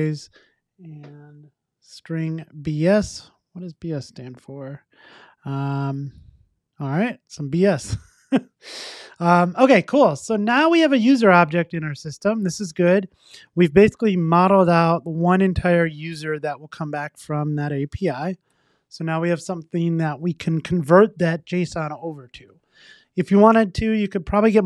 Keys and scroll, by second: 18.7 super+s.